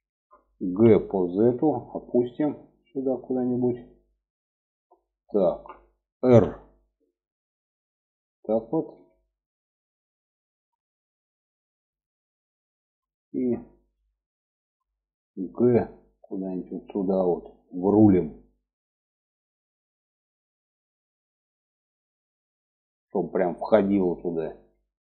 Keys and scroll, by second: 0.0 g, 5.6 r, 14.8 g.